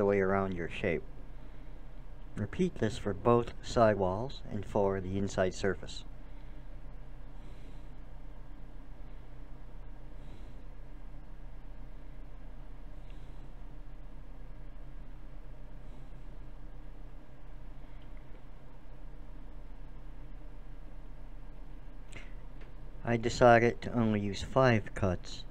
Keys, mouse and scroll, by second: 1.9-3.8 drag, 5.3-7.0 drag, 7.2 middle click, 8.4 middle click, 9.2-10.3 middle drag, 12.0-13.6 drag, 13.9 middle click, 14.8-17.0 drag, 17.1 click, 21.2-22.9 drag.